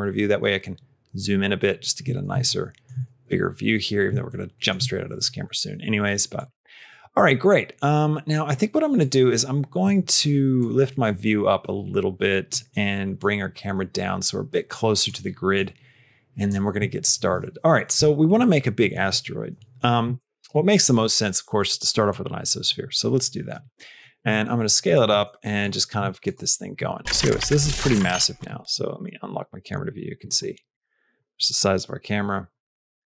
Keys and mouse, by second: 2.3 shift+middle click, 4.1 shift+middle click, 6.2 click, 8.8 click, 10.5-12.3 drag, 13.0-15.0 drag, 15.4 click, 19.9 shift+a, 22.0-23.9 drag, 24.1 s, 24.9 g, 25.9 s, 27.9 q, 28.3 q, 29.2 middle click, 30.3 middle click, 31.4-32.4 shift+middle drag, 32.8 s.